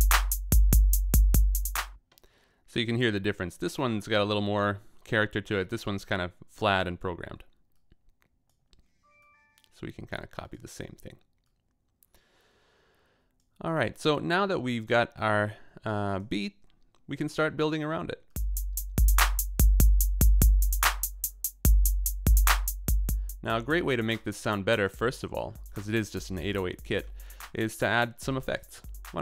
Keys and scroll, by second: 1.9 space.